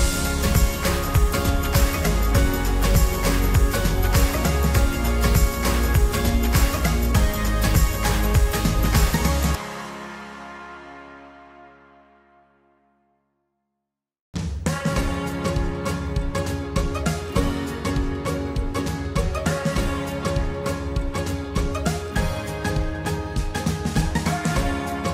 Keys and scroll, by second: 11.2 ctrl+t.